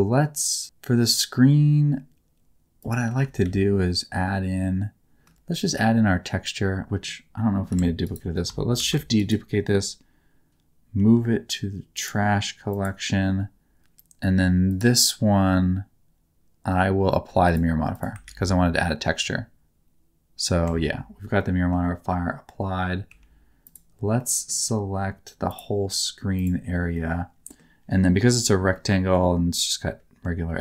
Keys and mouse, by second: 2.8 click, 3.4 shift+a, 7.7 g, 8.0 click, 8.7 shift+d, 10.9 m, 12.7 click, 14.7 click, 17.9 click, 18.2 ctrl+a, 20.6 Tab, 21.3 middle click, 23.0 3, 24.2 middle click, 25.4 click, 26.3 ctrl+click, 26.9-28.4 middle drag, 28.7 middle click.